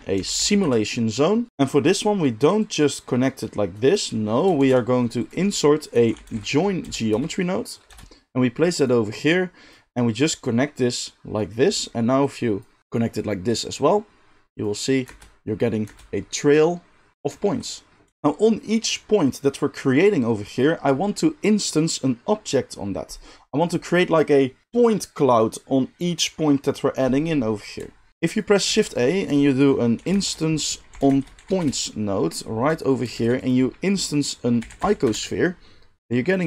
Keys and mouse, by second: 1.5-2.5 middle drag, 2.5-4.0 drag, 4.0-9.0 middle drag, 4.5 shift+a, 9.0-18.1 drag, 15.0 space, 15.8 space, 18.1-28.2 middle drag, 18.1 g, 28.2 click, 28.3-36.0 shift+middle drag, 28.6 shift+a, 33.1 shift+a, 36.0-36.4 drag.